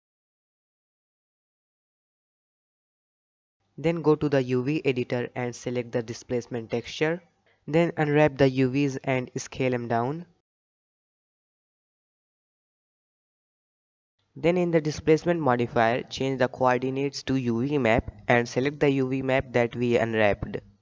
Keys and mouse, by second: 0.1-2.1 drag, 2.5 Tab, 8.2 u, 10.1 a, 11.1 s, 14.2 Tab, 15.6-16.6 drag, 17.6 click, 19.7-20.7 right drag.